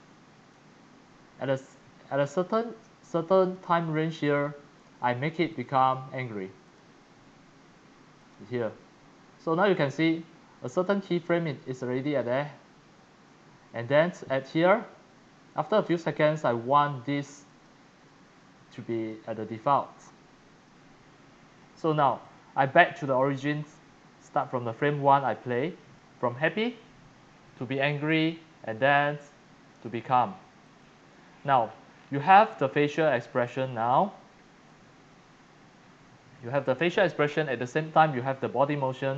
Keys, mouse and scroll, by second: 0.5-1.6 drag, 3.2-5.6 drag, 8.2 click, 9.7-15.6 drag, 17.5 click, 18.9 click, 22.2 click, 22.8-23.2 drag, 25.9 click, 26.1 click, 30.6 click, 31.2 click, 31.4-31.9 scroll, 31.9 scroll down 17, 33.4 click, 33.6 click, 34.0-34.7 scroll down 7, 34.7 click, 35.8 scroll down 5, 38.1 scroll.